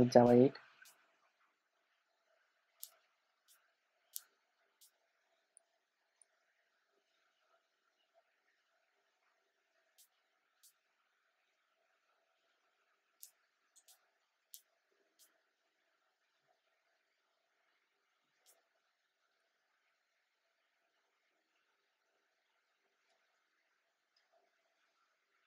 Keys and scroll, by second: 18.4 alt+super+l.